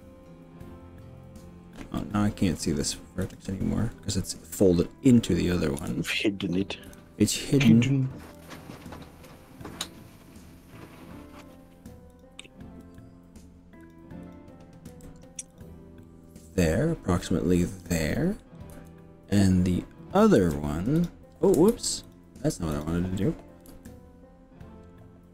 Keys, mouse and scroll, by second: 0.7-1.1 scroll up 3, 1.6 scroll down 1, 2.0 middle click, 3.2 click, 5.8 KP_1, 6.9 KP_3, 8.3 g, 11.5 click, 12.1 click, 12.9 g, 13.9 click, 14.3 click, 15.1 g, 15.7 click, 16.0-17.7 middle drag, 18.7 KP_3, 20.5 g, 21.1 click, 21.8 ctrl+z, 22.1 click, 22.8 click, 23.7 b.